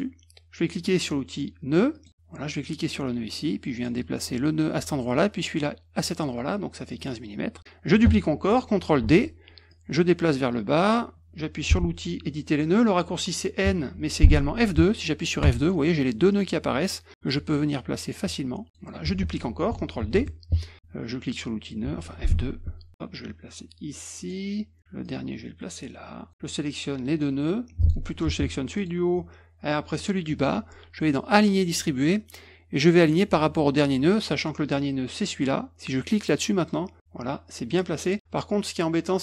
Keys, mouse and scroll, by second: 1.9 click, 2.7-3.8 drag, 5.0 click, 6.9 click, 9.0 ctrl+d, 9.7-10.9 drag, 15.4 F2, 16.3 click, 17.2 click, 20.0 d, 20.2 middle click, 22.2 F2, 22.9-24.2 drag, 25.0-26.3 drag, 26.4 click, 27.8 click, 28.7 click, 29.9 shift+click, 31.3 click, 32.8 click, 36.5 click.